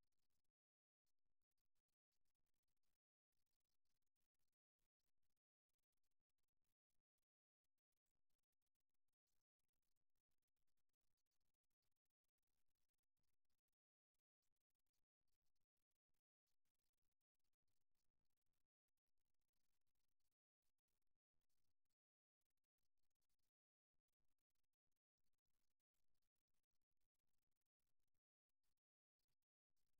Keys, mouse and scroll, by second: 1.0 right click, 1.9-3.3 right drag, 4.4 right click, 5.5-8.8 middle drag, 8.8-10.4 right drag, 13.1-14.2 right drag, 15.1 right click, 17.3 right click, 23.6-25.4 right drag, 26.9-28.0 right drag, 28.6-29.7 middle drag, 29.7 KP_3.